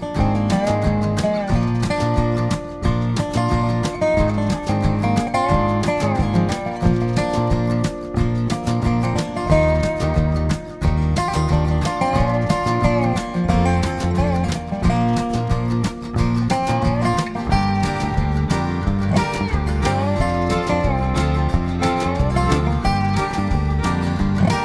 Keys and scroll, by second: 0.1 p, 2.9 ctrl+[, 2.9 Left, 2.9 ctrl+], 5.1 g, 10.0 ctrl+z, 10.3 ctrl+z, 22.4 ctrl+[, 22.7 ctrl+[.